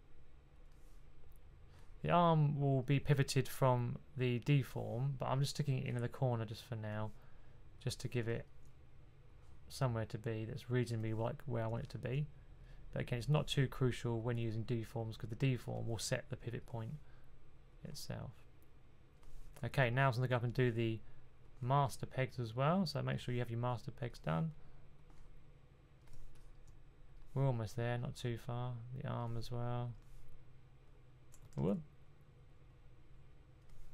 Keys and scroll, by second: 31.4 super+z.